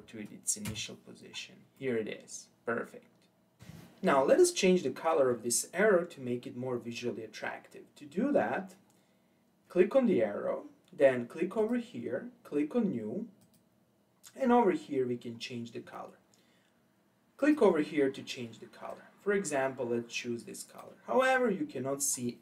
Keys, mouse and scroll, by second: 1.8-3.6 middle drag, 7.8-9.4 scroll down 4, 11.6 click, 13.4-14.5 drag, 14.5-16.7 scroll down 5, 17.4 click.